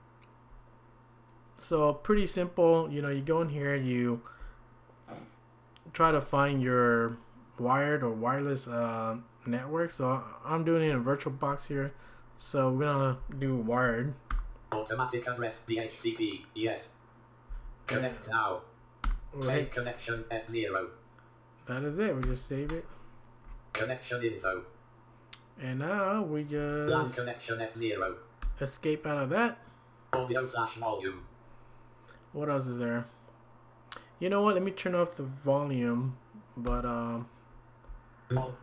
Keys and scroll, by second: 14.3 Return, 17.5 Down, 22.2 Return, 26.6 Down, 28.4 Escape, 36.7 Return.